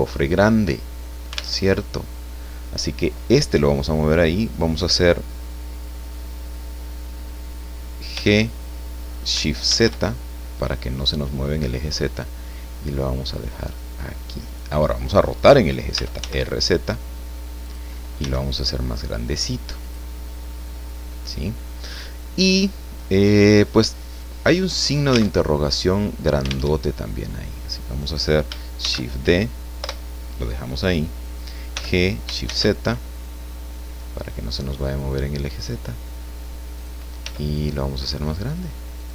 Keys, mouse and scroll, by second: 1.6 alt+Tab, 8.1 g, 9.6 shift+z, 14.5 click, 15.9 r, 16.2 z, 17.6 click, 18.2 s, 19.8 click, 24.7 right click, 25.2 alt+middle click, 25.4 alt+Tab, 26.7 alt+Tab, 28.8 shift+d, 29.8 Return, 31.7 g, 32.4 shift+z, 36.8 click, 37.2 s, 39.0 click.